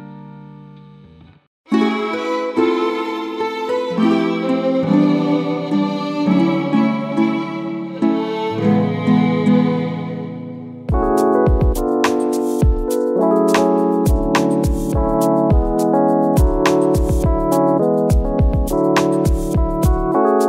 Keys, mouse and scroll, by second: 0.2 Tab, 0.6 click, 1.2 a, 1.8 scroll up 1, 2.6 KP_Decimal, 3.2 scroll down 1, 4.8 click, 5.0 Tab, 5.6 Tab, 6.4 ctrl+j, 6.9 Tab, 7.4 Tab, 7.7 a, 8.8 Tab, 9.0 scroll up 1, 9.2 s, 9.7 click, 9.8 scroll up 1, 12.9 scroll down 1, 13.2 scroll up 1, 13.4 scroll down 1, 13.6-14.6 scroll up 1, 14.6 click, 15.3 scroll up 1, 16.2-16.8 scroll down 1, 16.8 click, 17.2 KP_Decimal, 17.4-17.7 scroll up 1, 17.7 scroll down 1, 18.1 scroll up 1, 18.2 scroll down 1, 18.8 scroll up 1, 19.9 click.